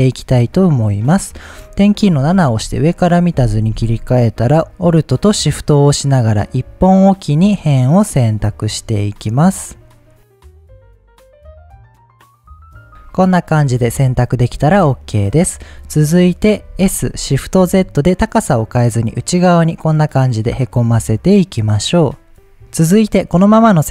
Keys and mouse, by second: 2.0 KP_7, 5.7 alt+shift+click, 6.5 alt+shift+click, 7.2 alt+shift+click, 8.6 alt+shift+click, 9.3 alt+shift+click, 10.5-12.6 alt+shift+drag, 12.8-15.0 middle drag, 16.8 s, 17.6 shift+z.